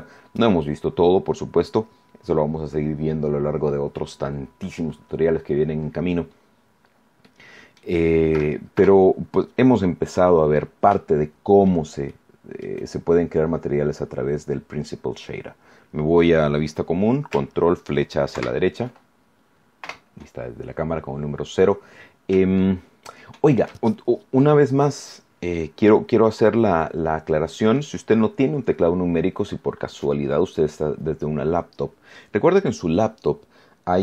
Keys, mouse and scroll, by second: 6.6-7.0 scroll down 2, 7.2 middle click, 8.7 KP_0, 9.7-10.3 scroll down 4, 11.0 shift+click, 12.0 shift+middle click, 13.3 scroll up 2, 18.3 ctrl+Right, 19.1-19.4 ctrl+scroll down 3, 19.8 KP_0, 20.9-21.2 scroll down 2, 21.5 scroll up 2, 22.5 shift+click, 22.6-23.7 shift+middle drag.